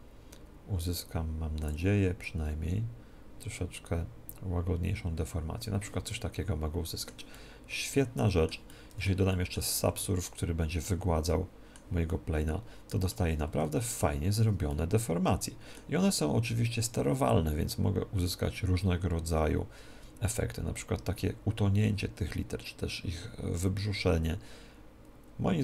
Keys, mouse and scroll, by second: 6.0-17.3 middle drag, 10.1 ctrl+2, 10.8 ctrl+2, 17.3-19.4 drag.